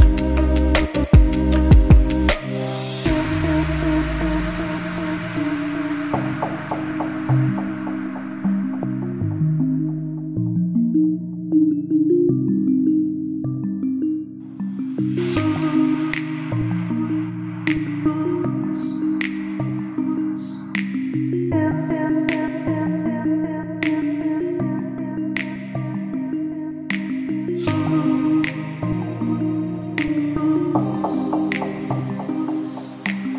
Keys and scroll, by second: 6.2 Delete, 28.7 2, 28.9 0, 30.6 4, 30.8 0, 33.2 shift+m.